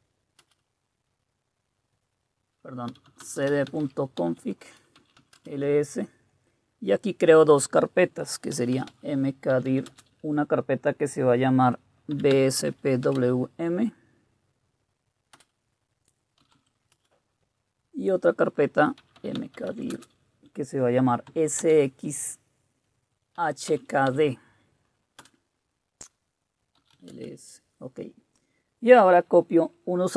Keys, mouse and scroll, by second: 0.4 Return, 2.6-5.7 typing, 8.3-10.2 typing, 11.9-13.7 typing, 15.3 Return, 16.2-16.9 typing, 16.9 Return, 18.7-20.2 typing, 21.3-21.6 typing, 23.1-25.2 typing, 26.5-27.4 typing.